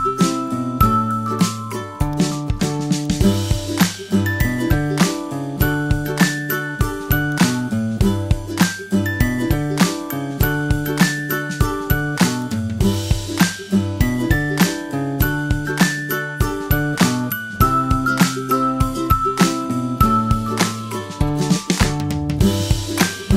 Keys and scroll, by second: 17.3 super+j, 18.8 super+t.